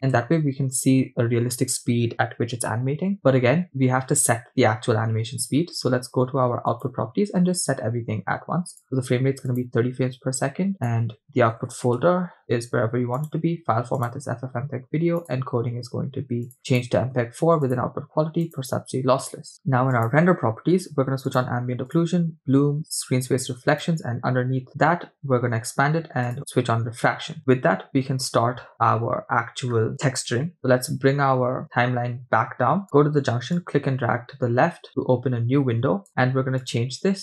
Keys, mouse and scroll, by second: 0.1 space, 3.7 space, 6.7 click, 8.8-9.7 drag, 10.7 scroll down 2, 10.8-12.0 drag, 11.7 /, 13.2-14.2 drag, 14.6-15.2 scroll down 2, 15.2 click, 15.5 scroll down 2, 16.4-17.1 drag, 17.6-18.7 drag, 19.2 scroll down 1, 19.5-19.9 scroll up 10, 20.0 click, 21.4 click, 22.0 click, 23.0 click, 23.8 click, 26.3 click, 27.4-28.0 scroll down 3, 29.7 scroll up 3, 31.6-32.8 drag, 33.5-36.1 drag, 36.6-37.2 drag.